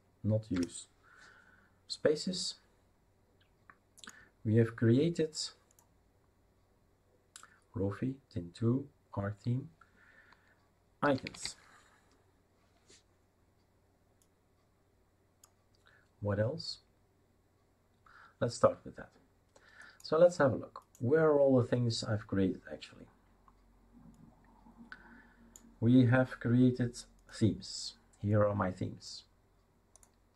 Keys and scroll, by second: 0.0-0.3 typing, 0.5 Return, 11.0-11.9 typing.